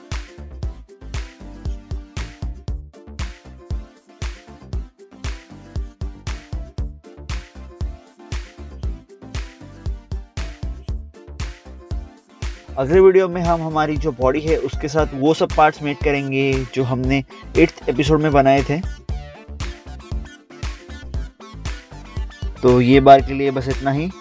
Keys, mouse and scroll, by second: 0.4 scroll down 1, 0.9 middle click, 1.3 middle click, 1.3 scroll down 1, 2.3 scroll up 1, 2.9 scroll down 1, 3.9 click, 4.6 scroll up 1, 5.5 middle click, 6.3 middle click, 6.6 scroll up 1, 7.7 scroll up 1, 8.0 click, 8.1 scroll down 1, 9.8 scroll up 1, 10.5 middle click, 11.0 middle click, 11.3 scroll down 1, 12.9 scroll down 1, 15.5 ctrl+click, 16.0 scroll up 1, 16.4 scroll down 1, 17.8 scroll up 1, 17.9 scroll down 1, 18.8 click, 19.2 right click, 19.5 right click, 21.2 right click, 21.3 click, 21.4 scroll down 1, 21.6 scroll up 1, 21.7 middle click, 21.8 scroll down 1, 22.7 scroll up 1, 23.1 middle click, 23.2 scroll down 1.